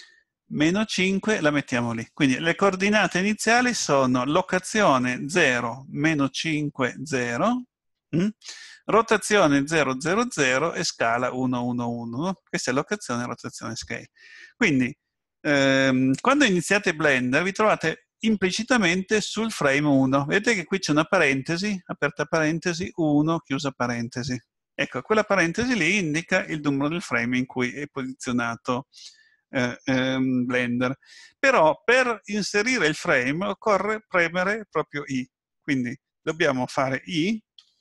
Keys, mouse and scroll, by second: 36.1 click, 37.6 i.